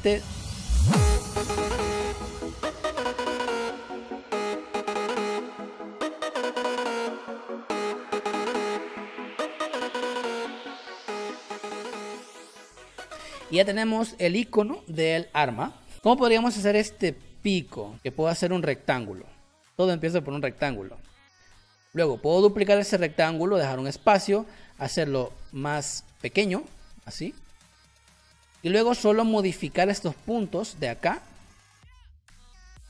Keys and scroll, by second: 0.0-6.5 typing, 3.0 ctrl+z, 4.7 ctrl+z, 7.2 ctrl+z, 7.9 ctrl+c, 8.0 ctrl+z, 8.9-11.3 typing, 9.4 Caps_Lock, 12.8 v, 15.9 space, 17.9 m, 21.7 v, 25.5 ctrl+z.